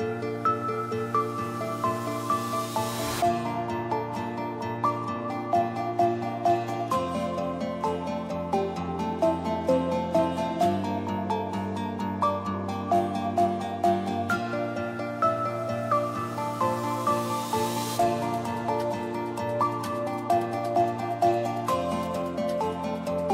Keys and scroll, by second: 7.7 -, 8.0 4, 8.1 Return, 10.7-11.7 typing.